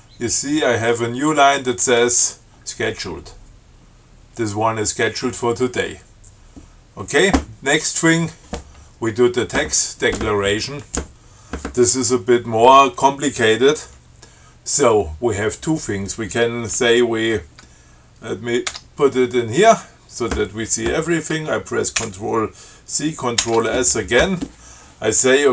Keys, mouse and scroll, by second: 8.2 click, 18.9 Tab, 22.2 ctrl+c, 23.6 ctrl+s.